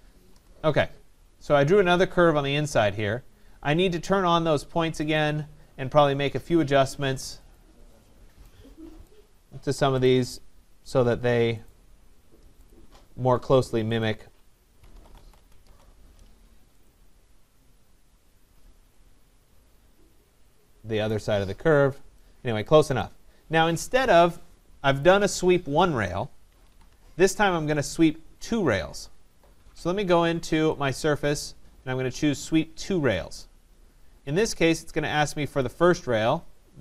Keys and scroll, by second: 0.3 Return, 15.3 Return, 26.5 Escape.